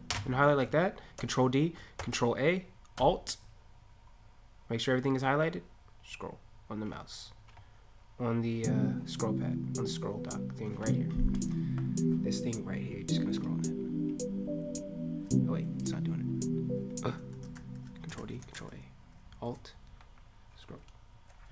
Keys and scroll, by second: 1.1 ctrl+d, 2.0 ctrl+a, 17.4 ctrl+a, 18.1 ctrl+d, 18.4 ctrl+a.